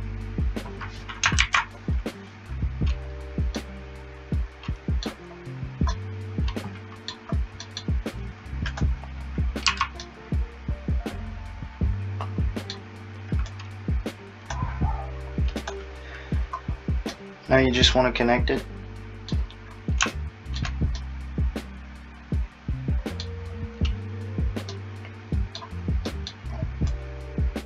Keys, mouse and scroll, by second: 1.4 alt+z, 3.6 middle click, 5.9 middle click, 7.7 middle click, 8.7 click, 9.7 a, 10.1 middle click, 13.5 click, 16.5 scroll, 21.0 middle click, 24.7 middle click, 26.9 click.